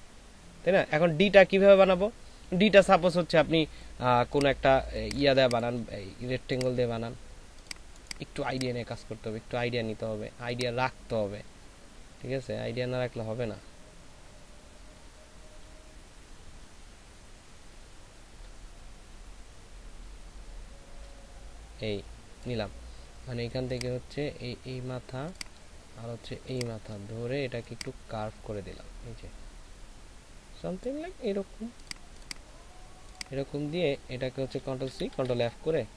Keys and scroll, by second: 4.8 ctrl+space, 12.7 space, 34.8 ctrl+c, 35.2 ctrl+f, 35.7 ctrl+alt+shift+f.